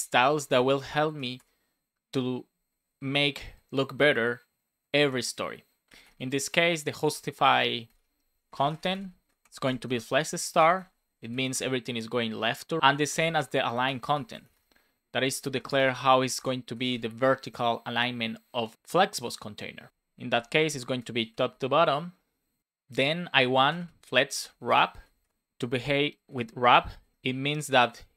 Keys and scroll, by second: 0.8 Right, 1.3 Return, 7.1 BackSpace, 8.4-10.5 typing, 11.0 Right, 11.4 Return, 13.8 BackSpace, 15.2-16.8 typing, 20.8 Right, 21.4 Return, 24.3 shift+w, 25.1 shift+;, 25.2 space, 26.9 BackSpace, 27.2 Right.